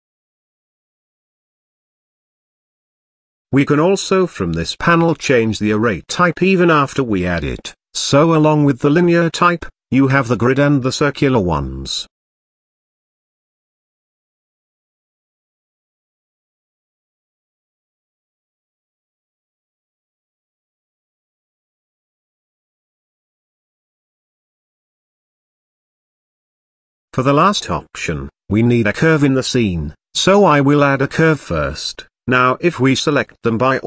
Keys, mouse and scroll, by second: 1.2-3.0 drag, 3.9-5.1 drag, 5.9-7.6 drag, 7.6-10.0 middle drag, 10.0-12.4 drag, 13.0-14.8 drag, 15.6-17.9 drag, 18.2 click, 19.5 click, 22.2 middle click, 23.0-24.5 drag, 24.5 scroll down 2, 24.7-25.8 shift+middle drag, 26.1 click, 28.4 scroll down 1, 28.7 shift+middle drag, 28.9 scroll up 1, 29.1 shift+a, 29.6 g, 29.8-30.1 shift+middle drag, 30.1 scroll up 1, 31.4-33.1 typing, 31.5 scroll down 1, 32.1 Tab, 32.3 click, 33.7 Tab.